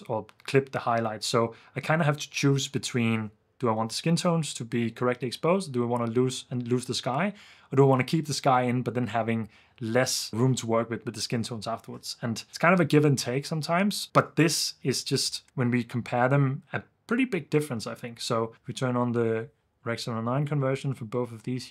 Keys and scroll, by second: 18.5 super+d.